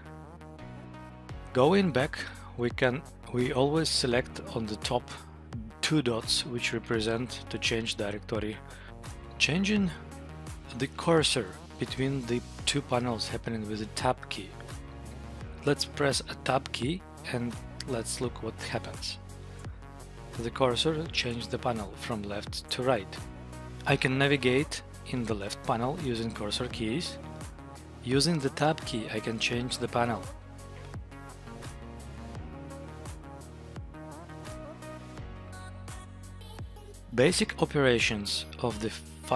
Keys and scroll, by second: 2.3 Down, 2.9 Up, 19.7 Tab, 23.5 Down, 24.3 Up, 25.3 Down, 26.0 Up, 26.5 Down, 27.3 Up, 27.7 Tab, 30.7 Up, 31.5 Up, 32.5 Up, 32.9 Down, 33.3 Up, 34.0 Up, 35.8 Tab.